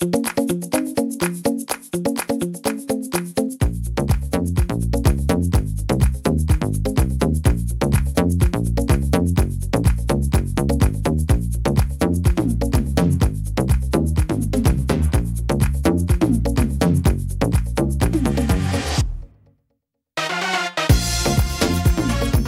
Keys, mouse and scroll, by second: 0.3 middle click, 0.7-1.3 scroll down 2, 1.4 middle click, 1.9-2.3 scroll down 1, 2.3 middle click, 2.9 right click, 4.2 click, 6.1 middle click, 6.8 right click, 8.7 click, 10.0 right click, 10.8 click, 12.8 middle click, 13.6 middle click, 14.6 ctrl+r, 16.4 ctrl+r, 18.7 right click, 19.6 click.